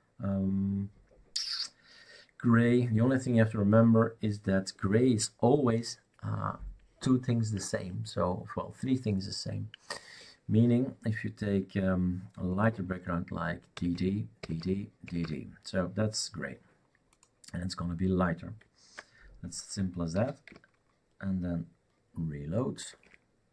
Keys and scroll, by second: 13.7 d, 13.9 d, 14.6 d, 20.1 ctrl+s, 22.9 shift+super+r.